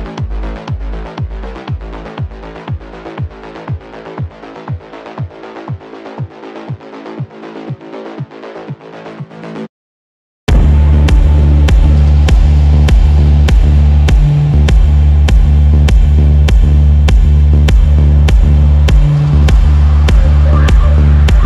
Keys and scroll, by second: 12.5 shift+F2, 15.3 shift+F2, 15.6 Escape.